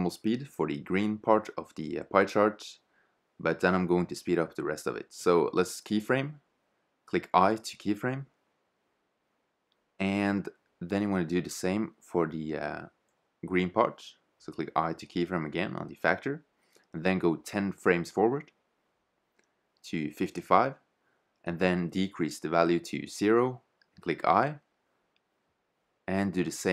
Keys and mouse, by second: 0.9 shift+z, 8.2 i, 12.1 middle click, 13.0 click, 13.0 i, 18.8 5, 21.8-23.7 drag, 24.3 i, 25.5-26.7 drag.